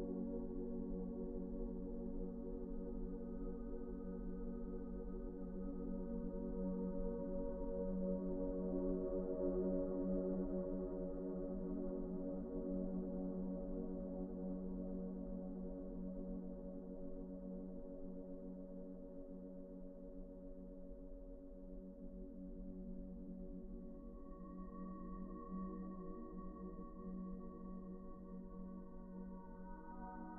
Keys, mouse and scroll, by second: 1.4 ctrl+z, 3.4 ctrl+z, 3.6 ctrl+z, 3.7 ctrl+z, 4.0 ctrl+z, 26.1 ctrl+z, 29.3 t, 29.6 F3, 29.9 F3.